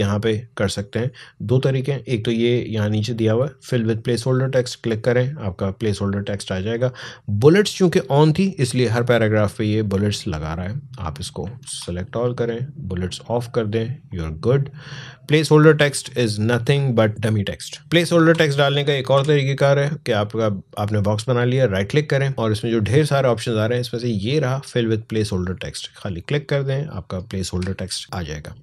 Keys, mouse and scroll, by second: 0.5 click, 4.0 click, 10.1 click, 11.4 ctrl+a, 11.8 click, 16.7 alt+scroll up 1, 17.4 alt+scroll up 1, 17.6-17.9 alt+scroll down 3, 17.9 ctrl+a, 18.9 Delete, 26.0 click.